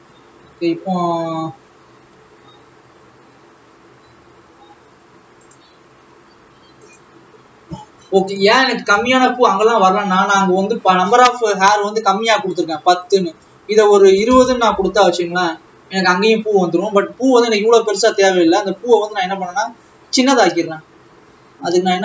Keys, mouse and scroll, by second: 0.7 alt+a, 3.4-4.0 scroll down 3, 8.2-9.3 scroll down 2, 9.3 scroll down 1, 11.2-14.8 scroll up 12, 14.8-18.4 drag, 18.4 scroll down 3.